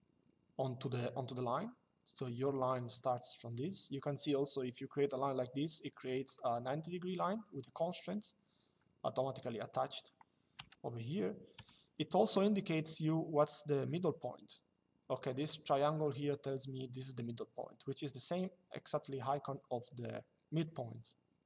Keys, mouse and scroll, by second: 1.9 click, 6.0 click, 8.2 Escape, 9.4 click, 11.3 click.